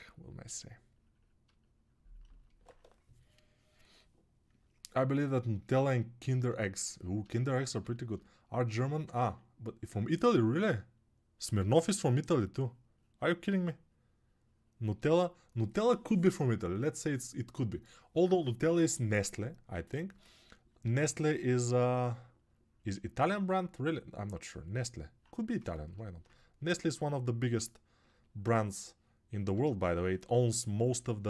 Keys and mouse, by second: 25.4 shift+right click.